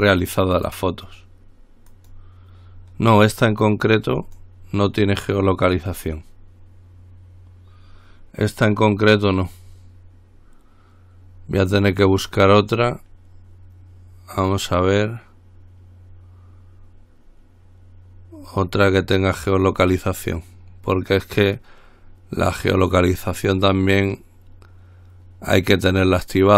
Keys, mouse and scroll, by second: 2.1 click, 4.4 click, 6.1 click, 12.2 click, 13.0-26.5 drag.